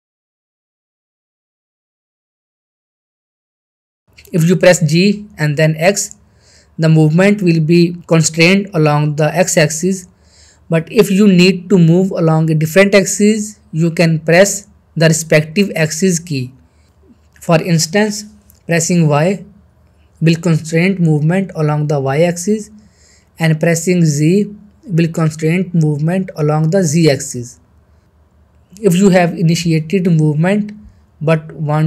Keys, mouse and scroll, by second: 0.2-0.6 middle drag, 3.0 ctrl+z, 3.3 middle click, 3.7 g, 12.0 x, 19.2 x, 19.3 y, 23.7 z.